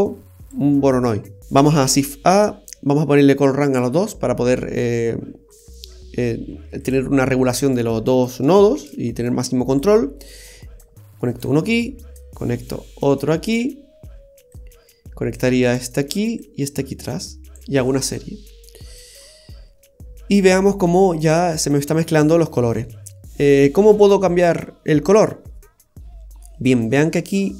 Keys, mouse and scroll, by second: 0.4 typing, 1.4 scroll down 3, 1.8 shift+a, 6.8 typing, 8.7 shift+d, 10.8 click, 12.3 click, 14.5 click, 16.4 click, 19.4-20.0 scroll down 2, 20.0-20.4 scroll up 1, 20.4-20.7 scroll down 1, 21.4 middle click.